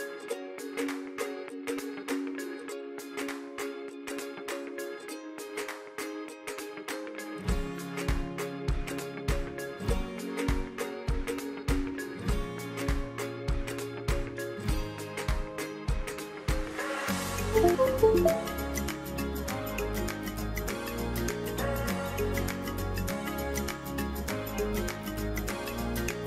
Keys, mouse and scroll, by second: 1.3 click, 4.2 click, 6.2 click, 8.4 click, 11.3 click, 17.8 click, 22.7 click.